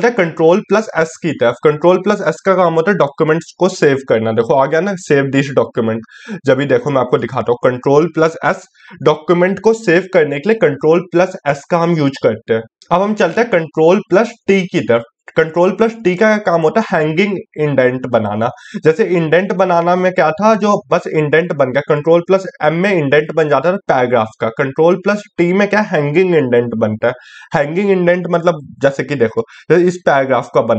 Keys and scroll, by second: 13.4 ctrl+t.